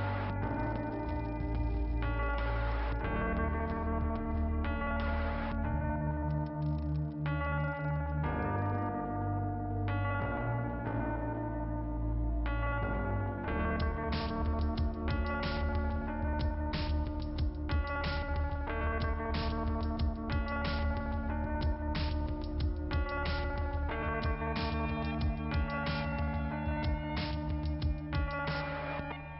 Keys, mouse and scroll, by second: 0.9 click, 2.3 click, 2.4 click, 4.8 scroll down 1, 13.0-13.7 scroll up 1, 14.9-15.2 scroll down 1, 22.8 scroll up 2, 23.5 middle click, 26.1-26.5 scroll down 2, 28.0-28.5 scroll down 2, 28.5-29.3 scroll up 2.